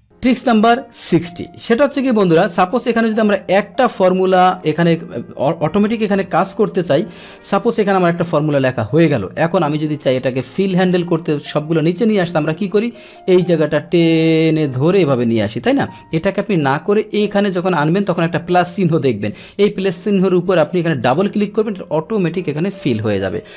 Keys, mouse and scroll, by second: 1.7 ctrl+shift+Down, 2.7 Delete, 4.0 click, 7.2 Return, 8.2 ctrl+z, 13.2-15.1 drag, 15.6 ctrl+z, 21.0 click.